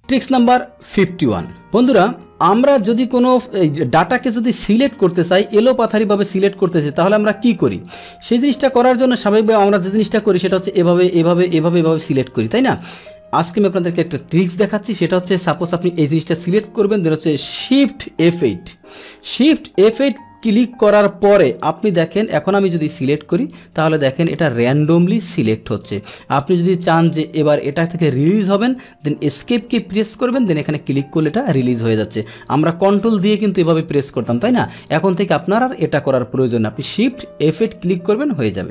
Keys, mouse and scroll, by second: 0.0 click, 1.4 click, 2.7 click, 6.0 click, 7.8 click, 9.6 click, 10.0 click, 10.4 click, 10.8 click, 11.1 click, 11.8 click, 12.4 click, 12.8 click, 15.8 click, 18.2 shift+F8, 18.3 shift+F9, 19.9 click, 20.6 click, 21.0 shift+F8, 21.4 click, 21.8 click, 22.1 click, 22.5 click, 23.0 click, 23.3 click, 23.9 click, 24.2 click, 24.6 click, 24.9 click, 25.3 click, 25.7 click, 26.3 click, 26.7 click, 27.1 click, 27.5 click, 28.2 click, 29.3 Escape, 30.2 click, 30.7 click, 31.1 click, 31.5 click, 32.4 ctrl+click, 32.8 ctrl+click, 33.1 ctrl+click, 33.4 ctrl+click, 33.7 ctrl+click, 34.0 ctrl+click, 34.3 ctrl+click, 34.7 ctrl+click, 35.1 ctrl+click, 36.4 click.